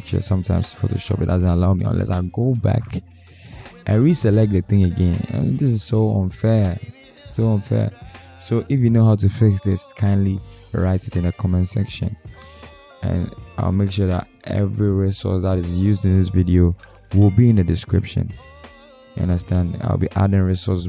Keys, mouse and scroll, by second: 0.2 double click, 5.6 double click, 17.5 Return.